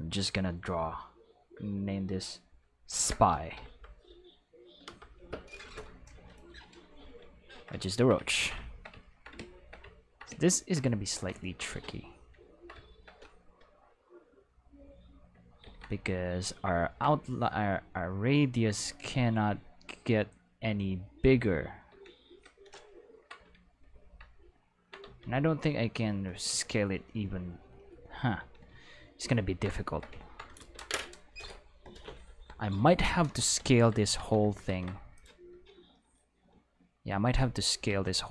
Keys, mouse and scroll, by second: 2.9 shift+s, 3.3 p, 3.6 y, 4.8 Return, 11.5 ctrl+middle click, 11.7 q, 14.2 click, 15.6 ctrl+z, 17.4 click, 18.9 click, 19.9 click, 20.3 click, 21.2 click, 21.9 Tab, 22.3 a, 23.4 q, 24.6 ctrl+middle drag, 25.2 alt+s, 26.7 right click, 27.7 right click, 28.4 Tab, 29.3 ctrl+middle click, 29.5 ctrl+middle click, 29.9 shift+middle click, 30.6 ctrl+s, 33.6 Tab, 34.2 Tab, 35.1 click, 37.9 alt+a.